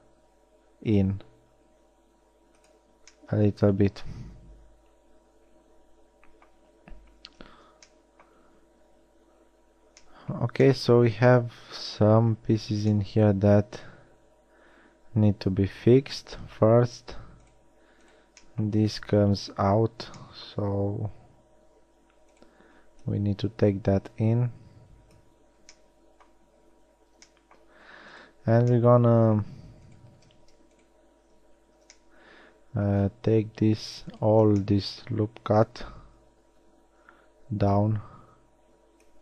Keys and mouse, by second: 4.6 middle click, 19.4-20.3 middle drag, 20.9 shift+g, 27.4 middle click, 28.2-28.9 middle drag, 29.7-30.8 shift+middle drag, 32.2 middle click, 34.7 middle click.